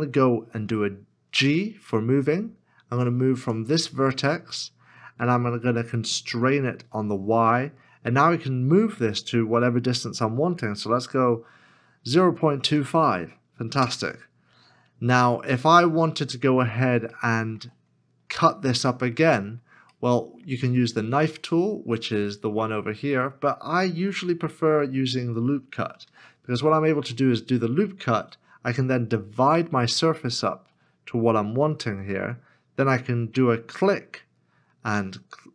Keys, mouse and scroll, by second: 1.6 g, 6.8 y, 12.0 KP_0, 12.5 KP_2, 12.5 KP_Decimal, 12.6 KP_5, 13.8 Return, 15.1 middle click, 16.2-16.9 scroll up 1, 17.1 shift+middle click, 19.9 middle click, 24.1 middle click, 26.0 ctrl+r, 29.3-31.3 scroll up 1.